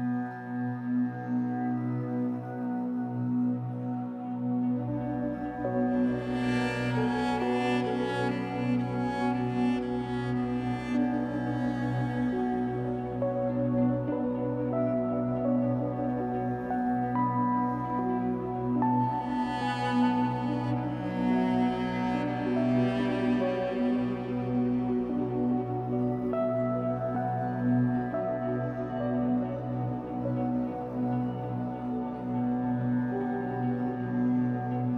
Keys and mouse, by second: 0.7 alt+click, 1.6 click, 2.4-3.1 middle drag, 3.1 click, 4.0 click, 4.6 click, 4.8 click, 6.0-6.7 typing, 6.8 Return, 8.0-8.5 drag, 8.2-11.8 typing, 8.9 click, 10.1 click, 12.0 Return, 13.3 click, 13.5 click, 13.8 click, 14.9-17.3 typing, 16.3 click, 16.8 click, 18.5 click, 20.1 click, 21.4 s, 22.2 click, 22.8 s, 24.1 click, 24.1 typing, 24.9 click, 26.1-26.6 typing, 28.0-28.9 typing, 30.6-34.9 alt+drag.